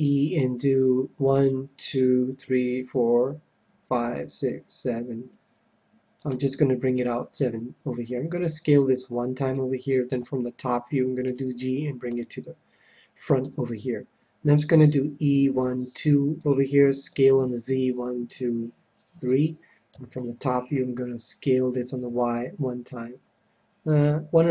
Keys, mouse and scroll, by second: 6.2-8.1 drag, 8.5 s, 9.5-11.0 drag, 10.1 KP_7, 11.2 g, 12.1-13.8 drag, 13.4 KP_1, 14.7 e, 16.5-18.2 drag, 17.1 s, 19.3-21.1 drag, 19.9 KP_7, 21.5 s.